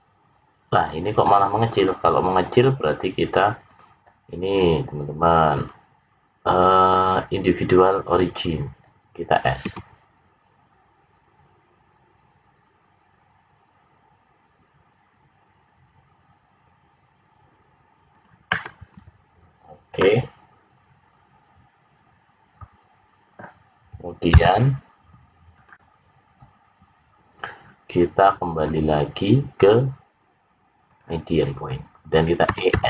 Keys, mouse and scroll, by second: 3.6 click, 5.5 click, 9.6 s, 19.9 middle click, 28.6 click, 32.4 e.